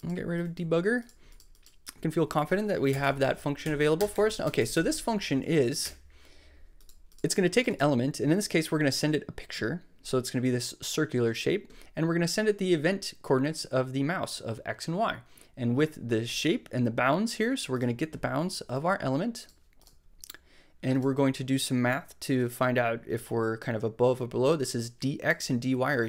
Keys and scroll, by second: 0.4 super+x, 2.9 BackSpace, 3.6 super+Up, 4.1 Return, 5.5 Down, 5.8 BackSpace.